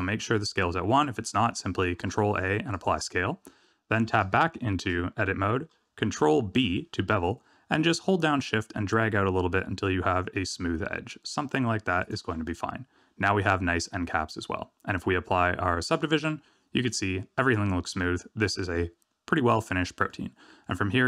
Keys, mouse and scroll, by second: 1.2 click, 1.9 ctrl+a, 3.5-3.9 scroll up 2, 3.9 Tab, 4.3 shift+middle click, 6.5 ctrl+b, 12.3 Tab, 16.3 click, 17.9-18.5 scroll down 1, 18.5 middle click, 18.5 scroll down 4.